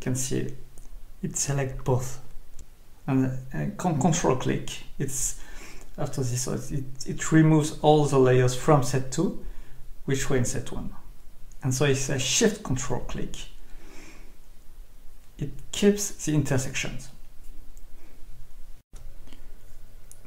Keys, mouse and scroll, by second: 2.1 shift+click, 6.9 click, 10.8 ctrl+click, 16.8 click.